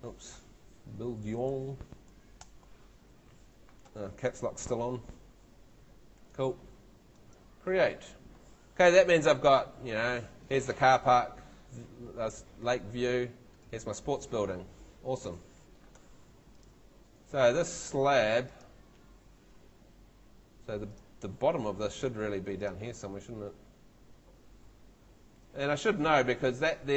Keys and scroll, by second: 1.0 shift+Left, 2.0 shift+Right, 2.4 shift+BackSpace.